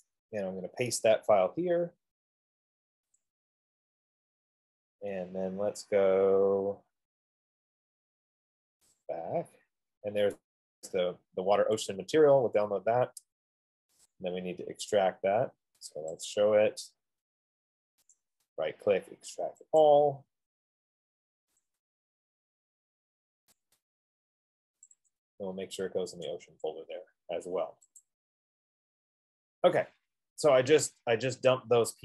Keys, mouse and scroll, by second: 0.6 right click, 3.6 click, 9.2 click, 12.2 click, 13.7 F15, 14.5 click, 16.6 click, 18.6 right click, 20.2 click, 22.0 click, 24.0 click, 25.4 click, 25.7 click, 26.9 click, 28.6 click.